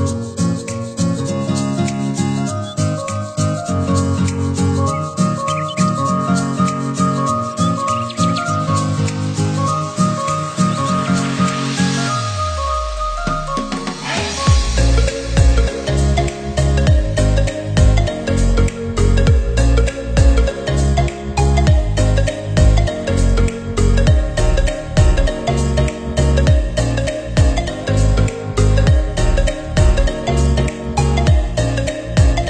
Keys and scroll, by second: 11.0 ctrl+c, 11.2 ctrl+v, 12.9 Delete, 15.9 ctrl+c, 16.5 ctrl+v.